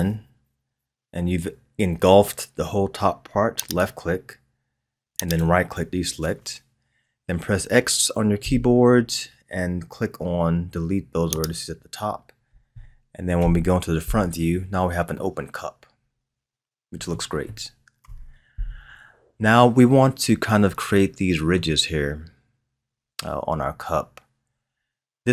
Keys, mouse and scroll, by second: 8.4 x, 13.3 KP_1, 14.6-15.1 scroll down 1, 15.1-18.0 middle drag, 18.0 KP_1, 20.4-20.9 scroll up 3, 20.9-24.0 middle drag, 24.9-25.3 scroll down 1.